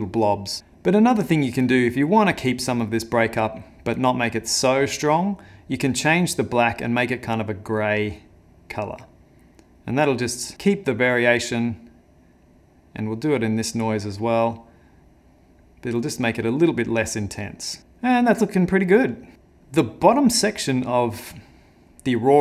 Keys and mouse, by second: 1.3 click, 4.0 click, 10.5 middle click, 11.3 click, 12.5 click.